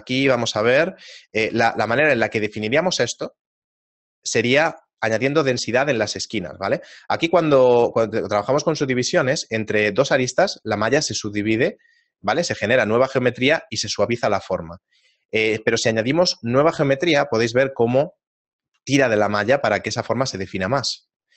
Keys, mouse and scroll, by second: 0.6 shift+middle click, 2.2 Tab, 2.2-3.2 scroll down 2, 3.2 shift+middle click, 3.7-4.0 scroll down 1, 5.9 ctrl+Tab, 6.8 right click, 7.2 shift+middle click, 9.1 shift+right click, 15.6 ctrl+r, 18.1 shift+middle click, 21.1 shift+middle click.